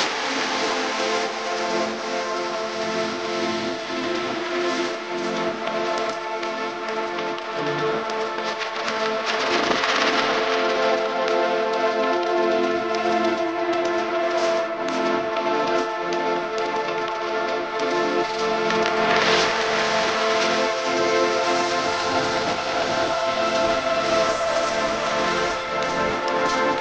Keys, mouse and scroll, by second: 8.1 right click, 16.5 double click, 26.1 Up.